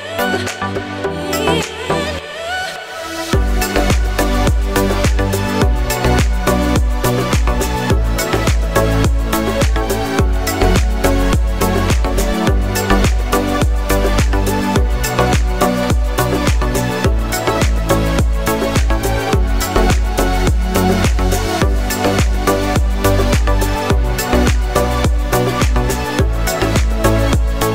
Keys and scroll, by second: 21.1 ctrl+d.